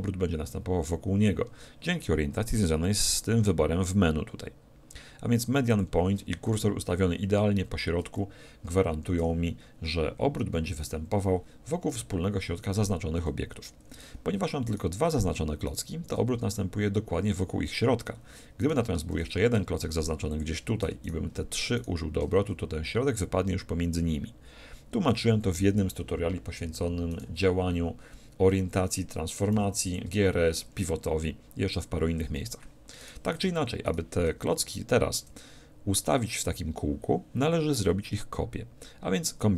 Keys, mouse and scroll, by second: 2.6-4.5 drag, 6.5 shift+c, 9.2 r, 14.7-17.4 right drag, 18.6-20.2 right drag, 19.1 shift+d, 20.4-22.1 drag, 21.1-23.6 right drag, 27.1-28.9 right drag, 29.5 x, 33.0-35.8 right drag.